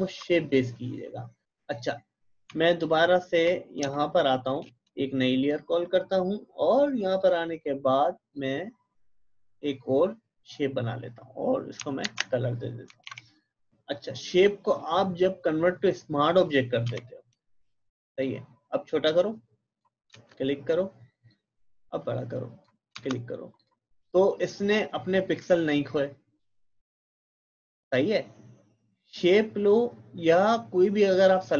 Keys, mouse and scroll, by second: 1.8 click, 3.8 space, 4.0 click, 4.3 space, 5.4-12.0 drag, 12.0 alt+Delete, 13.0 d, 14.6 right click, 15.8 click, 16.9 v, 17.6-23.6 drag, 29.2 click.